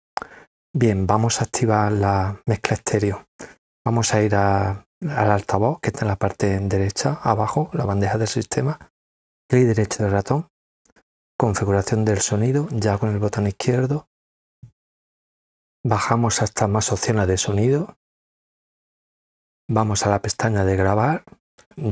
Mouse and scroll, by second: 9.0 right click, 13.4 click, 15.5-16.6 scroll down 3, 18.1 click, 20.6 click.